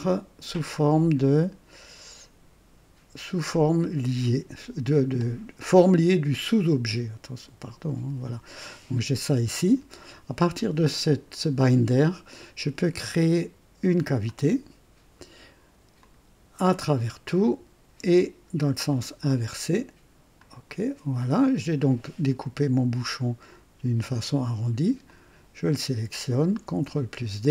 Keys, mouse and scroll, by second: 6.7 click, 11.0 click, 14.2 click, 15.9 click, 16.7 click, 18.8 click, 20.3 click, 21.5 scroll down 2, 25.0 click, 26.6 ctrl+d.